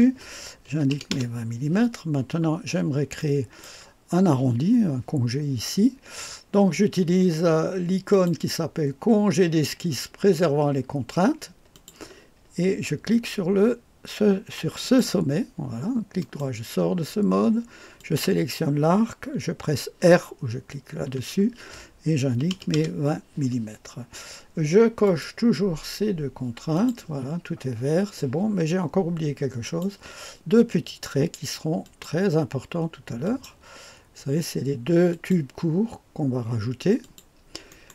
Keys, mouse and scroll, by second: 0.6 KP_2, 0.9 KP_0, 1.1 Return, 3.2 click, 8.1 click, 11.7 click, 14.8 click, 16.2 right click, 18.0-22.3 drag, 22.3 KP_2, 22.5 KP_0, 22.8 Return, 25.0 click, 26.7 click, 29.7 click, 31.8 click, 33.2 click, 35.1 click, 37.0 click.